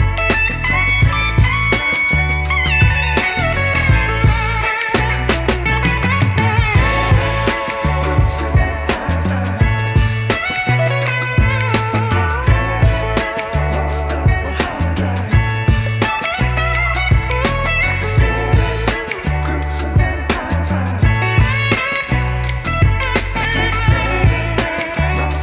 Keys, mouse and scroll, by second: 1.8-7.9 drag, 8.8-10.8 drag, 10.8 scroll down 1, 11.0 shift+a, 15.7-16.1 scroll up 4, 16.1 Tab, 17.0-18.8 right drag, 18.8-22.6 drag, 22.6 Tab, 23.2 right click, 24.9-25.2 scroll down 2, 25.2 KP_7.